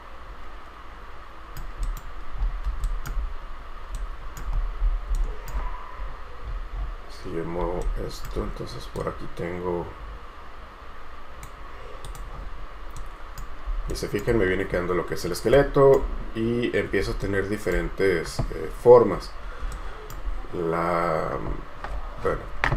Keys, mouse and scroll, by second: 0.0 right click, 2.5 scroll down 1, 2.9 Caps_Lock, 3.0 right click, 4.1 shift+right click, 4.7 scroll up 1, 5.3 shift+right click, 6.2-6.5 scroll down 1, 8.0 right click, 13.1 right click, 14.7-15.5 scroll down 1, 17.4 shift+right click, 19.3 scroll down 1, 19.9 shift+right click.